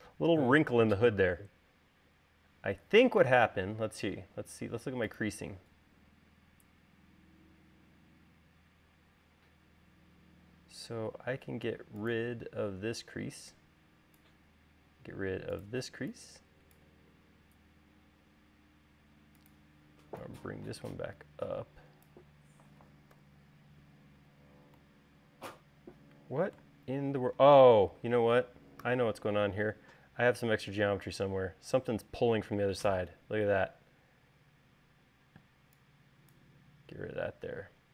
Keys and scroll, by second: 23.7 u, 29.2 u, 35.4 e.